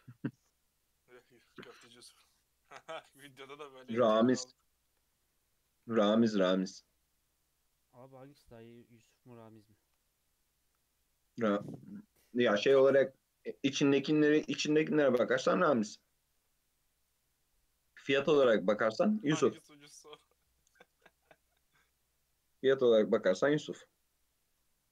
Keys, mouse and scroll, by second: 1.2-4.0 right drag, 4.0 scroll up 2, 4.6 shift+middle click, 5.0-5.6 scroll up 3, 5.6 Tab, 5.8 alt+z, 6.2 scroll down 2, 6.4-7.2 middle drag, 7.2-7.7 scroll up 1, 7.7 Tab, 7.9-9.9 scroll up 2, 9.9 alt+z, 10.8 scroll up 1, 10.9-11.3 middle drag, 11.3 scroll down 1, 11.8 click, 12.8-14.5 middle drag, 14.5 KP_1, 15.4 click, 16.3 g, 17.5-18.9 middle drag, 18.9 Tab, 19.4 alt+z, 20.0-22.3 middle drag, 22.3-22.7 scroll down 1, 22.7-23.8 middle drag, 23.8 Tab, 24.2-24.9 middle drag.